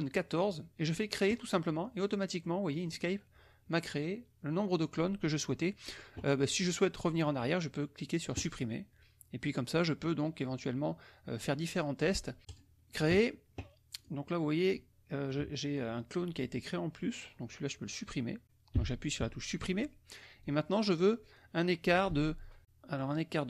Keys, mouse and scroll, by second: 0.1 click, 1.3 click, 2.4 middle click, 8.3 click, 12.4 click, 14.0 click, 15.3 click, 18.7 Delete, 20.4-21.5 drag, 22.6 alt+Tab.